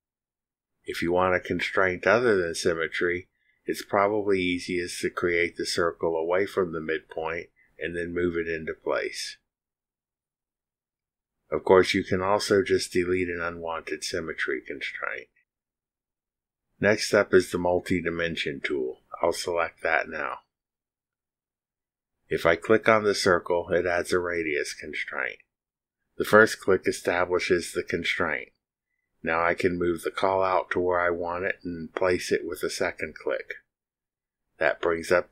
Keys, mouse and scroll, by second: 5.4 click, 10.5 click, 12.1 click, 18.7 click, 29.1 click, 34.0 click.